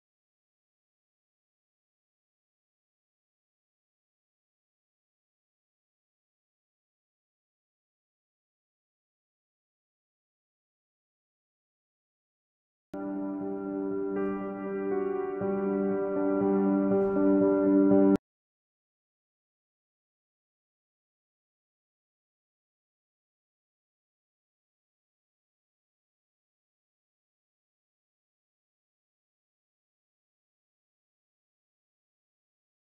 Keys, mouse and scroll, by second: 3.9 click, 4.0-4.5 scroll up 1, 5.2 click, 6.4-6.8 scroll down 1, 7.1-9.6 middle drag, 9.6 click, 12.7-14.7 drag, 25.7-26.6 scroll up 1, 26.6 space, 27.6 click, 29.5 scroll down 1.